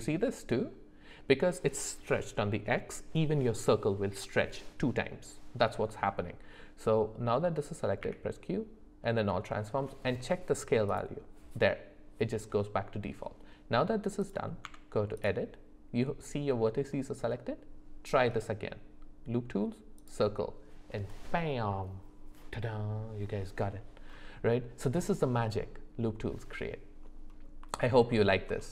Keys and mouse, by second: 8.0 q, 14.2 click, 14.6 Tab, 18.3-20.1 right drag, 27.8 alt+middle click.